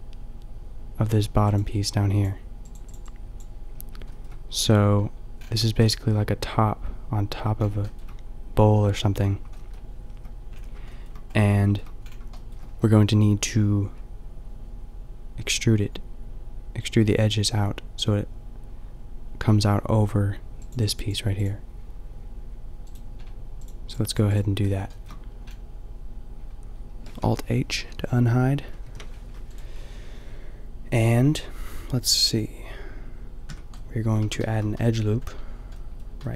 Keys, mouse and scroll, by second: 1.5-4.6 drag, 4.6-5.1 middle drag, 5.1-5.4 drag, 5.4 middle click, 5.5 click, 8.0-9.5 middle drag, 23.1-24.9 middle drag, 25.0-26.7 middle drag, 28.6 middle click, 28.9 alt+h, 33.5 Tab, 34.2 a.